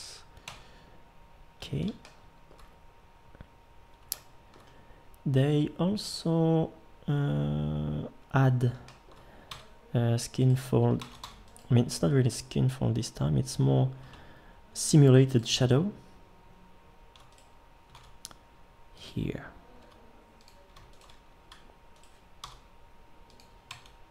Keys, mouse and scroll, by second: 0.5 Tab, 9.5 Tab, 11.0 ctrl+Tab, 17.9 shift+d, 19.8 e, 22.4 l, 23.7 Tab.